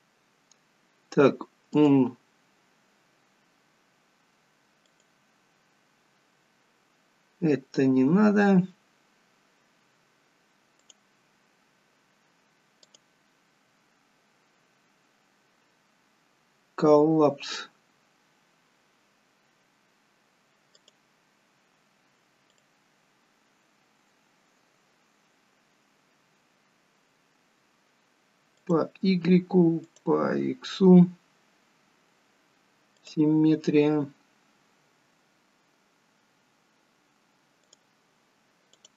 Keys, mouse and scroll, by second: 1.7 click, 5.9 click, 10.9 click, 15.2 click, 20.8 click, 28.7 click, 35.9 click.